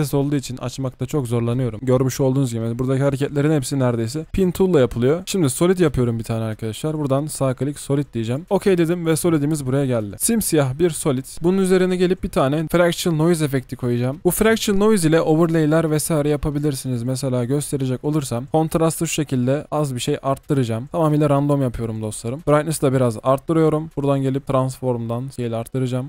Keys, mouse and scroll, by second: 5.3 right click.